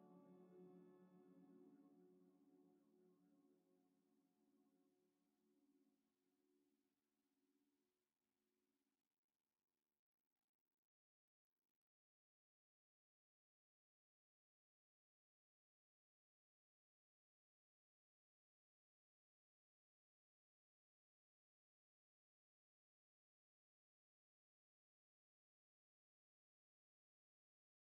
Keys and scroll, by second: 2.8 5, 3.0 Return, 6.5 z, 6.8 s, 7.9-8.7 typing, 10.0 Tab, 11.3-12.0 typing, 13.5 a, 16.5 ctrl+c, 19.6 ctrl+v, 20.6 ctrl+c, 25.1 ctrl+v, 25.6 ctrl+c.